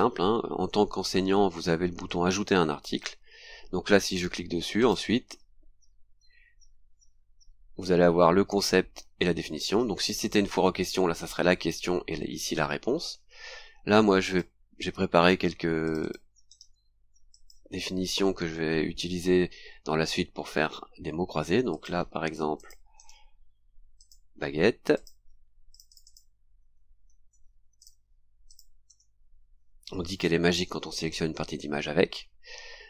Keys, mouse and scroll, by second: 0.6 scroll up 2, 4.8 click, 7.4-7.7 scroll down 2, 14.3 click, 15.8 click, 16.5 right click, 17.3 click, 21.7 click, 22.6 click, 23.0 right click, 24.0 click, 25.0 click, 25.7 click, 27.1 ctrl+c, 27.8 click, 28.5 ctrl+click, 28.9 ctrl+v, 32.5 scroll down 2.